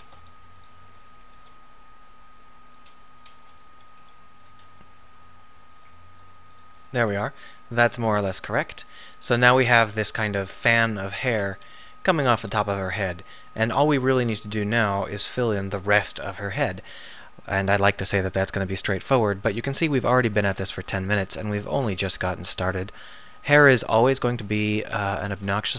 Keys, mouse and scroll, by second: 0.1 shift+d, 1.4 r, 4.0 r, 5.8 g, 8.2 Tab, 16.6-20.0 middle drag, 20.0 Tab, 25.3 shift+d.